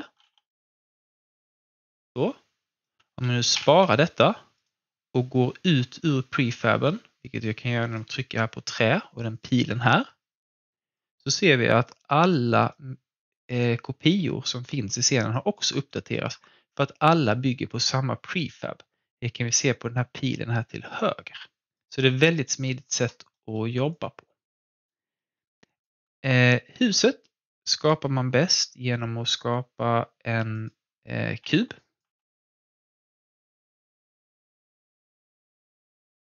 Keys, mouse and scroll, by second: 0.2 ctrl+z, 0.4 click, 1.9-3.5 alt+drag, 3.5 ctrl+s, 4.5 click, 7.2-11.2 drag, 11.4 alt+click, 12.3-14.6 alt+middle drag, 15.3 alt+click, 15.8 alt+middle click, 21.6 click, 21.9-22.4 scroll down 1, 22.6 alt+click, 23.3 alt+middle click, 23.9 alt+click, 25.1 alt+middle click, 25.6 alt+click, 30.5 click, 31.4 w, 31.8 alt+click, 32.1 alt+w, 32.7-34.8 drag, 34.8 r, 36.1 ctrl+z.